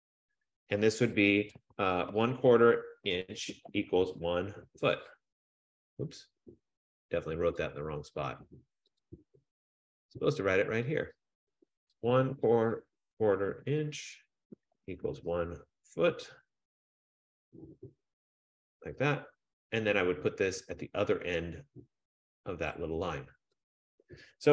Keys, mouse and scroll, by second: 0.0-4.7 typing, 7.8 click, 9.2 click, 10.5 click, 11.7 click, 11.8-16.8 typing, 18.5 click, 20.2-22.6 drag, 20.2 [, 20.2 •, 23.8 click.